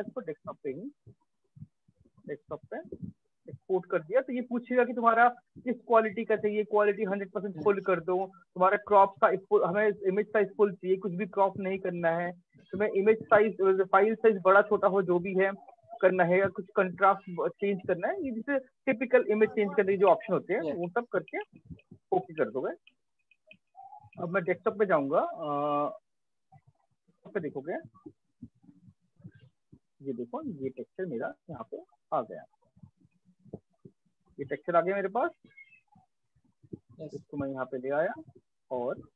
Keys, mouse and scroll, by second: 1.2 click, 2.2-7.5 drag, 14.2-18.2 drag, 20.3 click, 22.4 click, 23.7 click, 26.9 click, 28.0 click, 28.7 click, 31.0 click, 33.9 click, 35.4 shift+click, 37.1 click, 38.9 ctrl+space, 39.1 ctrl+click.